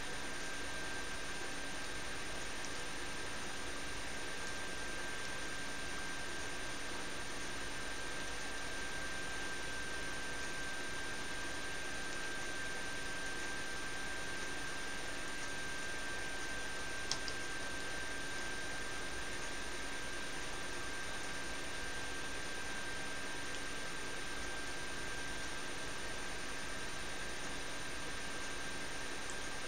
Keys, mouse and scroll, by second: 5.5 s, 24.5 s.